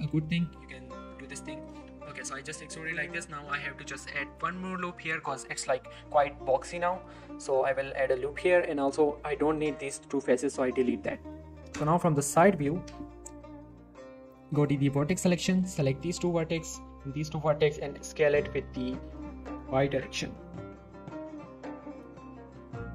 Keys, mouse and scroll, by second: 0.5 scroll down 1, 0.9 scroll up 1, 1.1 z, 1.3-1.7 scroll down 1, 1.7 z, 1.9 scroll down 1, 2.0-2.5 middle click, 3.1 shift+scroll up 1, 3.2 ctrl+r, 4.9 right click, 5.5 middle click, 7.1 ctrl+r, 7.4 click, 7.6 right click, 9.5 click, 9.7 shift+click, 10.1-10.7 x, 12.5 x, 13.4 scroll up 1, 14.6 click, 15.2 z, 15.4 shift+middle click, 15.6-16.2 shift+scroll up 2, 16.2 click, 17.0 shift+click, 17.3 shift+middle click, 17.9-19.7 typing, 20.9 y, 21.9 right click.